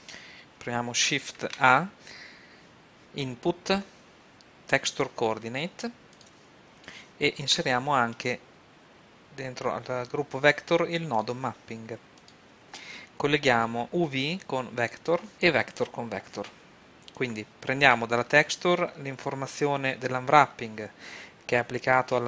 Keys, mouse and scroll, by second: 1.3 shift+a, 6.2-8.1 drag, 7.5 shift+a, 12.3-13.8 drag, 15.4 click, 15.9 click, 16.6 middle click, 17.5-18.9 drag, 21.8 click.